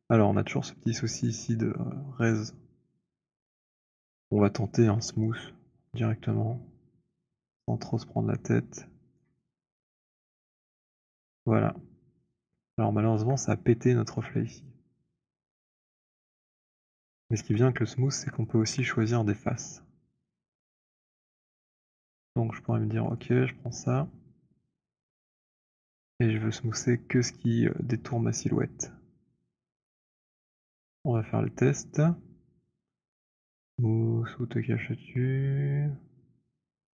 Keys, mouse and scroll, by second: 0.1 middle click, 0.2 alt+middle click, 0.8 alt+middle click, 1.4 alt+click, 2.3 click, 9.3 shift+right click, 10.5 click, 13.1 shift+click, 16.1 alt+click, 16.8 alt+click, 16.8 alt+right click, 16.9 z, 17.3 z, 18.5 alt+click, 20.2 right click, 21.4 click, 22.2 click, 22.5 alt+click, 23.0 shift+click, 23.3 shift+click, 25.0 >, 25.2 >, 25.4 ., 27.7 alt+>, 28.1 alt+., 30.0 alt+click, 30.7 >, 31.8 alt+click.